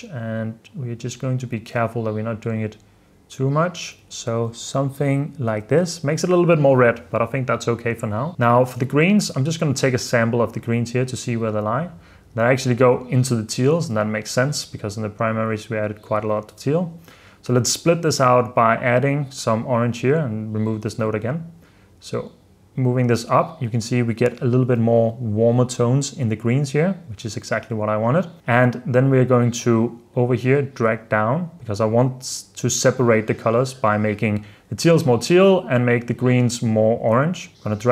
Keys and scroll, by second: 4.1 super+f, 4.7 super+d, 4.9 super+b, 5.1 super+d, 5.6 super+f, 5.9 super+s, 24.8 super+f, 25.4 super+d, 26.5 super+f.